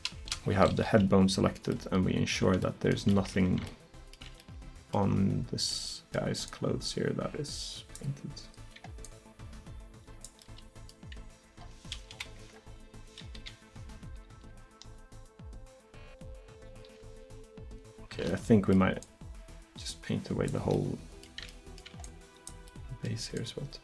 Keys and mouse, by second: 1.8-3.9 middle drag, 6.5-8.0 middle drag, 9.6-11.2 middle drag, 12.2 KP_1, 13.4 KP_3, 14.4 r, 19.1-21.0 drag, 22.1-23.8 drag.